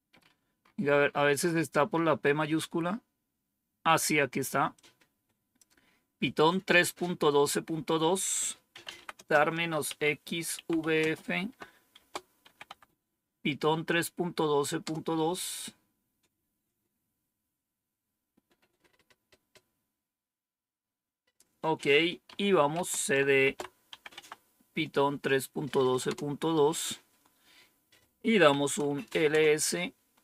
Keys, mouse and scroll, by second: 0.0 scroll up 2, 4.6 click, 8.3-12.3 typing, 12.5 Tab, 14.7 Return, 21.9-23.8 typing, 24.0 Tab, 25.9 Return, 28.4-29.2 typing.